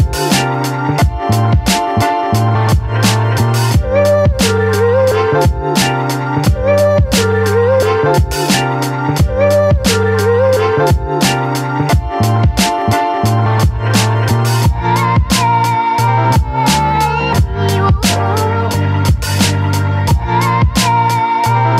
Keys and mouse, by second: 0.1 middle click, 1.1 shift+middle click, 1.4 shift+middle click, 2.1-6.0 typing, 6.9 middle click, 8.0 b, 9.0 middle click, 9.8 b, 10.8 middle click, 11.5 middle click, 13.6-15.1 drag, 16.8 ctrl+z, 17.7 click, 18.3 click, 18.8 click, 19.9 ctrl+z, 20.8-21.7 drag.